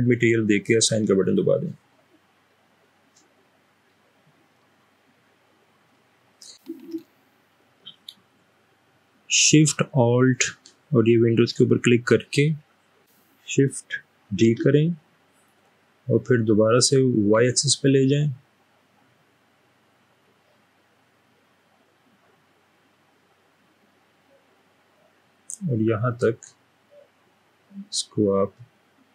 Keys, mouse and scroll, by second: 3.9 middle click, 3.9-4.9 scroll down 2, 4.9-5.9 middle drag, 14.5 typing, 17.3 typing.